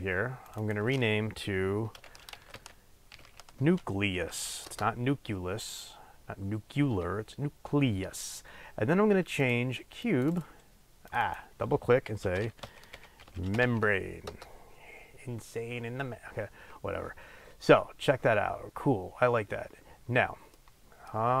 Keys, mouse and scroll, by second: 0.4 click, 0.6-9.5 drag, 10.0 click, 11.0 click, 11.2-20.5 drag, 14.4 Return, 20.5-21.4 middle drag.